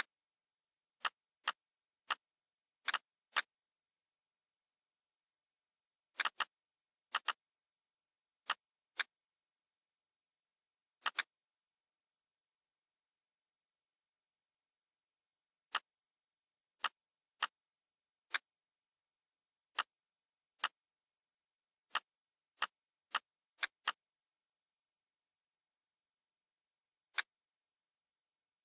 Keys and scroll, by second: 11.7 BackSpace, 12.8 0.